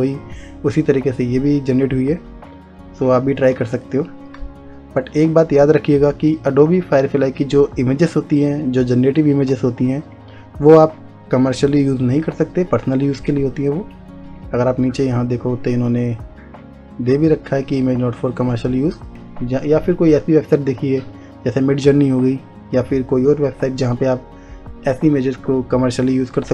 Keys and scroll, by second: 3.7 space.